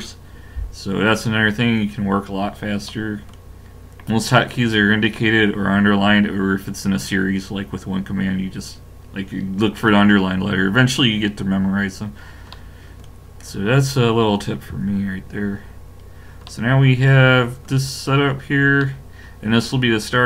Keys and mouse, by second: 2.9-7.6 middle drag, 12.1-14.7 middle drag, 14.7 KP_5, 15.9 middle click.